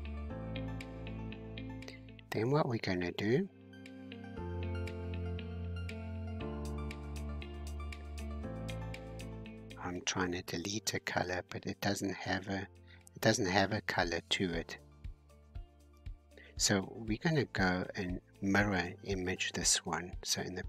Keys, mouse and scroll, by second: 3.4 click, 4.2 scroll down 2, 7.2-8.9 scroll up 13, 8.9-9.8 scroll down 4, 9.8-11.8 scroll down 2, 13.7 click, 14.5-17.0 middle drag, 17.0-17.7 scroll down 1, 17.7-19.5 scroll down 18.